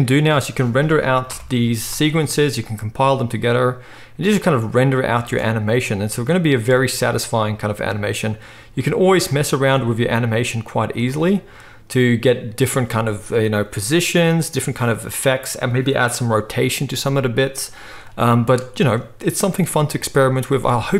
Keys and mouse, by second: 1.2 shift+Left, 2.0 space, 5.1 space, 6.0 space, 6.7 space, 9.3 z, 11.3 click, 11.3 middle click, 11.3 right click, 17.6 z, 19.8 middle click, 20.5 ctrl+s, 20.5 ctrl+middle click.